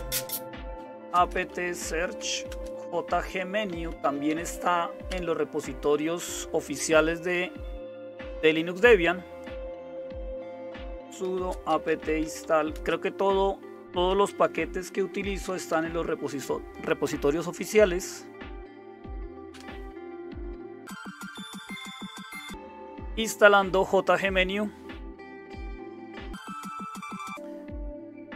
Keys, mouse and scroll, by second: 0.0-28.3 typing, 19.5 Return, 22.5 Return.